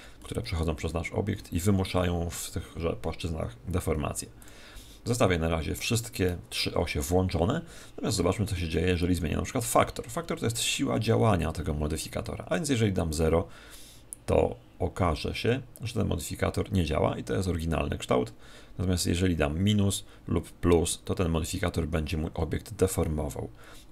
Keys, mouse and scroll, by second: 4.3 click, 12.5 click.